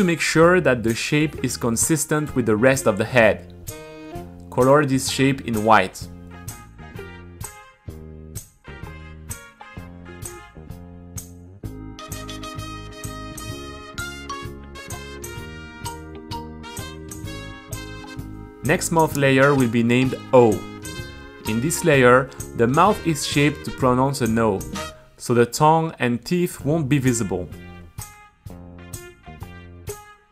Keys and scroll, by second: 2.6 Return, 5.0-8.1 typing, 9.5-12.2 typing, 12.3 super+r, 13.2 Return, 14.9 super+a, 15.2 t, 17.4 Return, 19.0 Return, 19.6 q, 20.2 super+c, 20.4 d, 24.1 d, 24.3 Return, 24.6 o, 26.3 Return, 26.5 t.